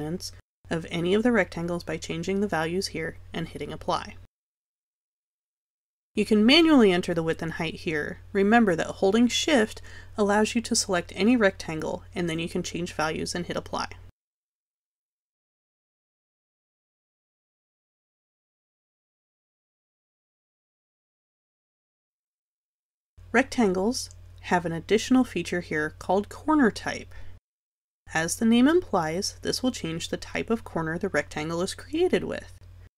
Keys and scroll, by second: 2.1 0, 22.4 Delete.